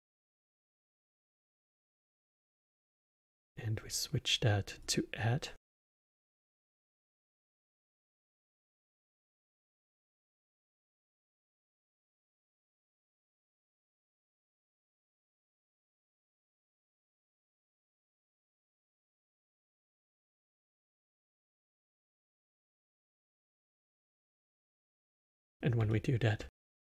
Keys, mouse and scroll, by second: 0.6 click, 1.5 shift+d, 2.9-5.6 drag, 5.6 scroll up 2, 6.4 click, 7.5-10.0 alt+middle drag, 10.0 click, 11.6 shift+d, 14.0 click, 15.1 click, 17.1 shift+d, 19.4 click, 21.0-22.4 drag, 22.9 drag, 23.5 click, 23.9-24.8 drag, 24.8-26.8 alt+middle drag.